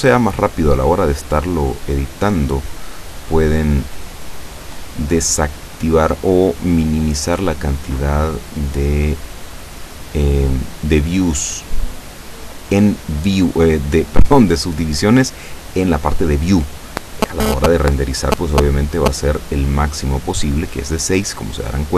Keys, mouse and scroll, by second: 0.4 click, 1.9 right click, 7.2 click, 8.8 click, 11.7 click, 12.3 click, 12.9 click, 15.7-17.0 middle drag, 17.0-17.4 scroll up 1, 19.5 click, 21.7 click.